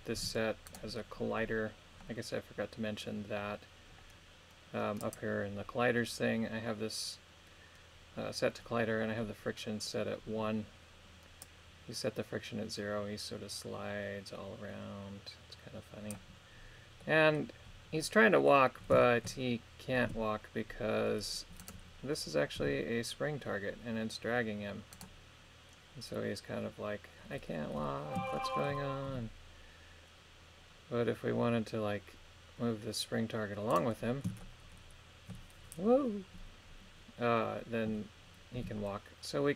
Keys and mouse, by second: 0.2 g, 5.1 click, 11.5-16.2 drag, 17.1 middle click, 18.1 middle click, 19.1 shift+middle click, 20.1 KP_3, 21.6 right click, 22.7 g, 24.9 right click, 28.4 shift+middle click, 29.1 g, 33.8 right click, 34.5 shift+middle click, 38.6 g.